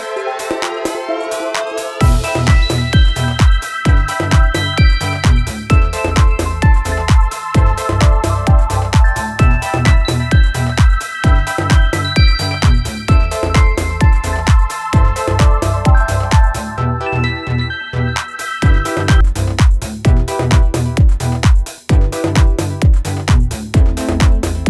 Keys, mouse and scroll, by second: 4.9 alt+Num_Lock, 5.0 scroll down 1, 10.3 scroll up 1, 14.3 scroll up 1, 15.9 scroll up 1, 16.5 scroll up 1, 18.6-19.1 alt+scroll down 2, 22.6 alt+Num_Lock, 22.8-23.1 scroll down 3, 23.3 space, 23.5 click, 23.9 space.